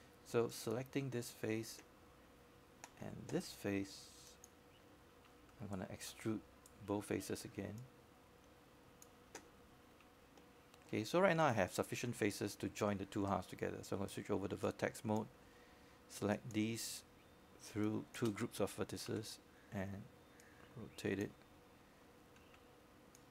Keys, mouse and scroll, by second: 1.2-1.5 scroll up 1, 1.5 right click, 2.7 click, 3.9 Delete, 4.8 click, 5.4 Delete, 7.9 click, 14.5 shift+click, 16.0 shift+right click, 18.2-19.5 drag, 20.7 alt+middle click, 21.4 scroll up 1, 21.7 alt+middle click.